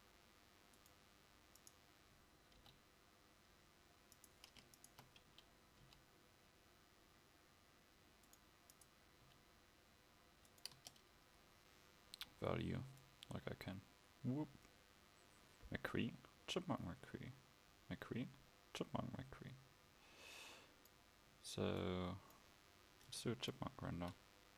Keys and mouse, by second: 2.0 click, 2.0 right click, 2.6 g, 5.9 g, 10.7 Tab, 10.7 g, 24.0 KP_0.